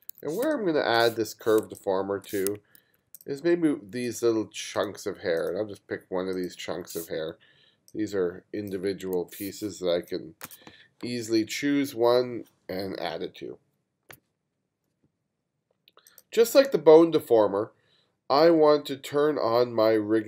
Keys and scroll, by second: 0.5 space, 1.6 space, 2.8 2, 9.2 super+z, 10.0 space.